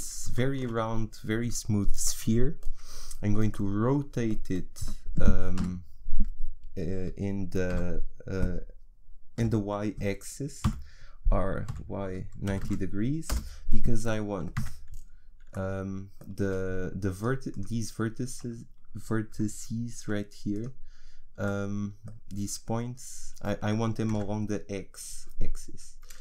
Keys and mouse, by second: 5.6 KP_1, 7.7 KP_3, 9.4 KP_1, 10.6 r, 14.1 click, 14.6 z, 16.4 a, 17.2-18.3 right drag, 17.6 click, 18.3 a, 19.9 Tab, 20.9-22.5 right drag, 24.4 Tab.